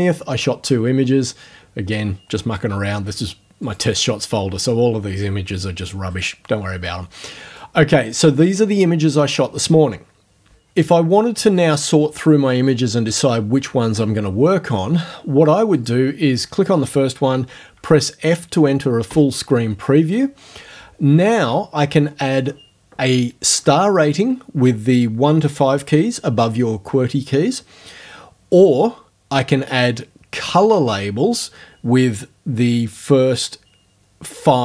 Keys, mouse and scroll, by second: 3.7 click, 7.5 click, 15.8 click, 19.1 f.